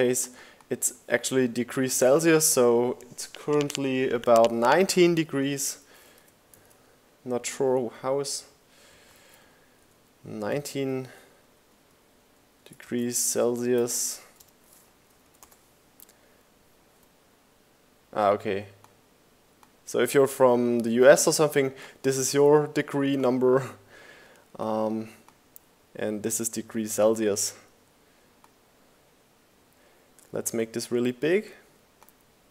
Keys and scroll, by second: 2.5 1, 4.0 BackSpace, 7.3 super+t, 7.7 Tab, 8.3 1, 9.4 9, 10.3 shift+Caps_Lock, 10.7-12.7 typing, 13.1 Down, 13.4 Return.